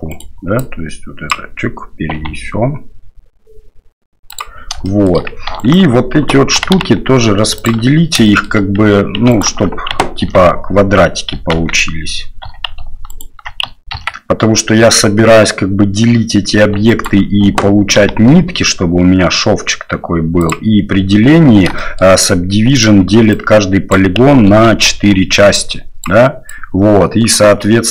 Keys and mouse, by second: 0.7 click, 2.1 g, 4.9 shift+drag, 5.6 alt+right click, 6.5 g, 8.4 shift+drag, 9.3 alt+right click, 10.2 ctrl+x, 11.5 ctrl+z, 12.4 2, 13.1 alt+click, 13.9 ctrl+x, 16.9 alt+click, 18.0 g, 21.9 shift+middle click, 23.0 d, 23.5 click, 24.4 ctrl+z, 25.1-27.5 d, 25.5-27.5 drag.